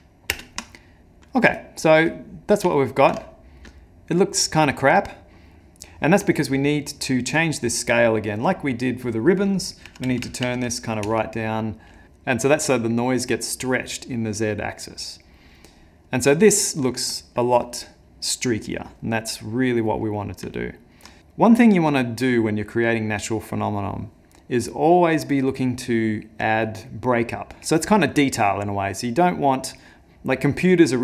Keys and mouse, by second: 0.5 ctrl+space, 1.0 middle click, 1.6 shift+middle click, 2.2 middle click, 2.7 ctrl+middle click, 3.2 ctrl+middle click, 4.5 middle click, 5.6 ctrl+middle click, 6.6 middle click, 8.5 click, 16.3 middle click, 20.0 middle click, 20.6 ctrl+middle click.